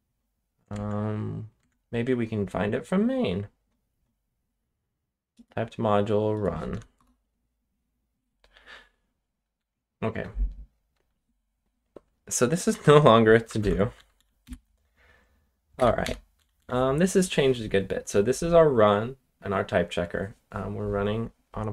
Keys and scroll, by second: 0.7 ctrl+Tab, 1.5 ctrl+Tab, 6.7 w, 6.9 Return, 9.5-10.1 j, 10.9 j, 13.3-17.0 typing, 18.5 typing.